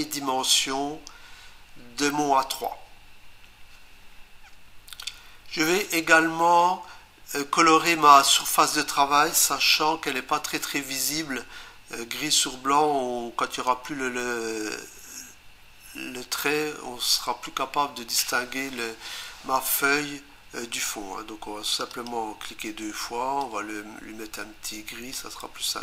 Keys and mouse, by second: 21.7 click, 21.9 click, 22.1 double click, 23.4 click.